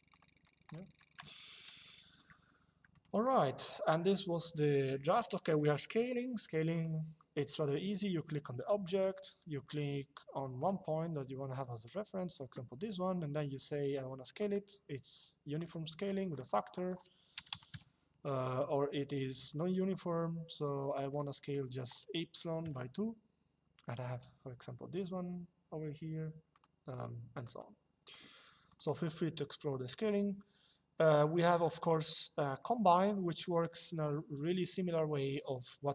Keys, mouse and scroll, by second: 2.6 click, 5.3 click, 6.4 click, 10.3 click, 11.5 click, 14.1 click, 16.0 click, 17.1 KP_0, 18.4 click, 20.8 click, 22.3 KP_2, 26.2 click.